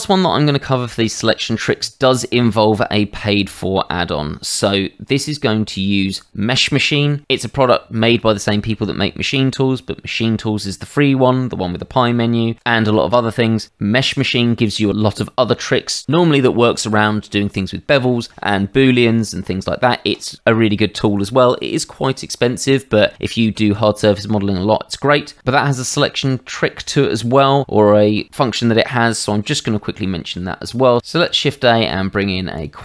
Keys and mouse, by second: 2.7 middle click, 11.8 Tab, 14.9 middle click, 23.7 click, 24.1 middle click, 25.2 shift+middle click, 30.0 shift+middle click, 31.0 shift+a, 32.5 click.